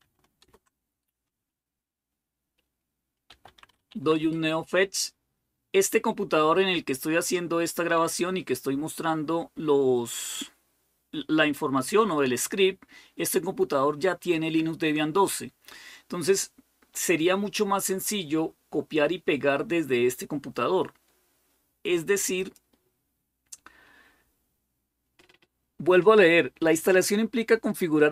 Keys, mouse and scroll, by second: 0.2 super+Return, 2.9-4.0 typing, 22.2 click.